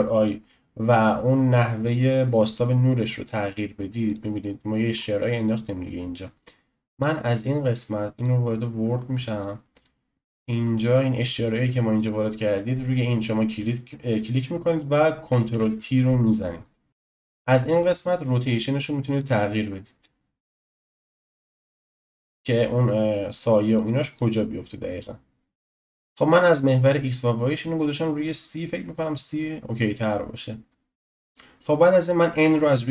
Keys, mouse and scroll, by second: 4.1 click, 4.9-6.9 scroll up 3, 6.9-8.9 drag, 8.9-9.4 scroll down 1, 9.4-10.3 shift+middle drag, 10.3-11.0 scroll up 9, 11.0-11.9 shift+middle drag, 11.9-14.9 drag, 15.5 ctrl+t, 16.6 shift+middle click, 16.9 ctrl+z, 19.2-25.8 drag, 25.8-27.5 scroll up 10, 27.5-28.6 scroll up 1, 31.1 click, 32.3 n.